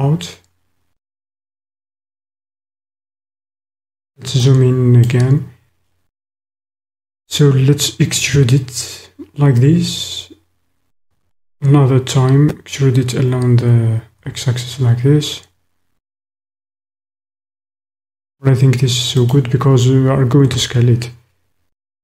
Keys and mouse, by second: 0.8 middle click, 0.9-2.5 drag, 3.2 middle click, 3.4 click, 3.6 middle click, 4.5 click, 5.0 middle click, 11.1 e, 14.2 x, 20.4 s.